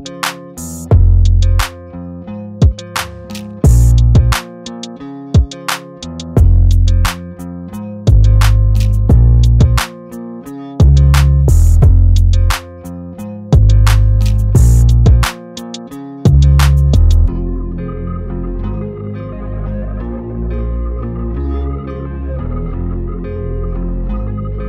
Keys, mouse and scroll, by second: 1.8 b, 2.4-3.0 alt+right click, 2.9 space, 3.0-3.9 click, 3.6 alt+right click, 4.0-5.0 click, 4.6 space, 4.8 click, 5.1 alt+right click, 5.4-6.6 click, 6.2 space, 6.3 click, 7.7 space, 7.8 click, 8.9 space, 9.0 click, 10.6 space, 10.8 click, 12.3 alt+scroll down 1, 12.5 space, 12.6-14.8 drag, 14.4 space, 14.5-15.7 drag, 16.2 space, 16.3-17.8 drag, 17.9-18.8 alt+scroll down 1, 18.9 space, 19.0 click, 20.0 alt+click, 21.6 click.